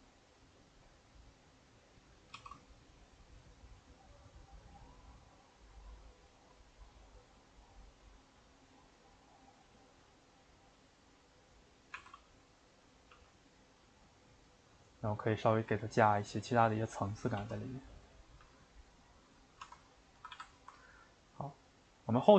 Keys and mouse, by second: 2.4 shift+d, 10.8-12.0 middle drag, 12.0 r, 13.1 g, 19.4-19.8 middle drag, 19.8 Tab, 20.2 a, 20.3 a, 20.5-22.3 ctrl+middle drag.